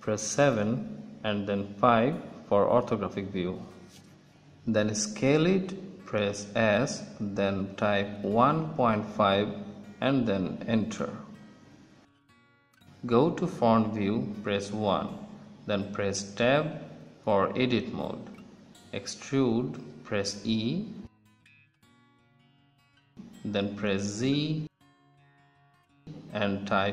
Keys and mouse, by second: 2.0 KP_5, 3.9 s, 11.2-14.2 drag, 14.2 KP_1, 16.1-17.6 drag, 18.4 Tab, 19.7 ctrl+shift+z, 19.7 KP_1, 21.3 e.